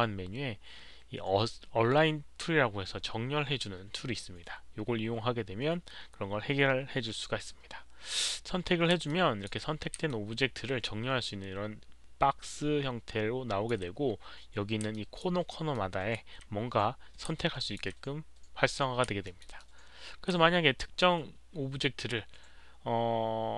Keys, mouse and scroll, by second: 0.5 alt+click, 8.0 click, 9.0 alt+click, 10.0-13.6 alt+drag, 14.9 alt+click, 15.7 alt+click, 17.3 alt+click, 19.2 alt+middle click, 19.5 alt+click.